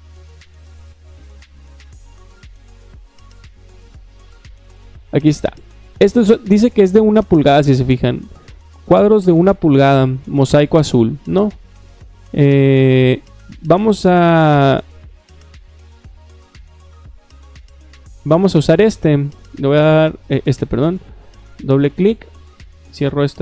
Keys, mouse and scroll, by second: 0.2-3.8 middle drag, 4.3-5.3 middle drag, 5.3 click, 12.3 middle click, 16.4 middle click, 18.3 middle click, 19.5 click, 20.3 click, 20.9 click, 21.1 click, 22.6 click.